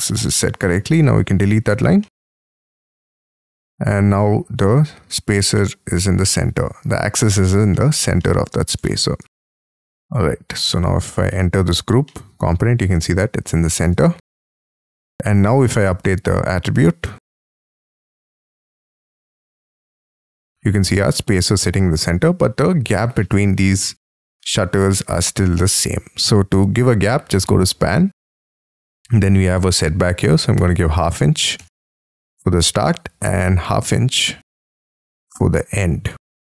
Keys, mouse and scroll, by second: 1.0 e, 1.9 space, 2.0 middle click, 2.5 Escape, 4.0-5.6 scroll down 37, 5.6 middle click, 6.3-7.3 scroll down 24, 7.8 shift+middle click, 8.2 middle click, 8.8 shift+middle click, 9.3-10.4 scroll up 38, 10.8 double click, 11.0 double click, 11.5 middle click, 12.1 middle click, 14.0 Escape, 14.3-15.3 scroll down 17, 14.8 Escape, 15.3 middle click, 19.3-20.0 scroll up 12, 20.0 middle click, 21.9-24.2 scroll down 18, 24.2 middle click, 30.5 typing, 31.8 shift+', 33.7-34.7 typing.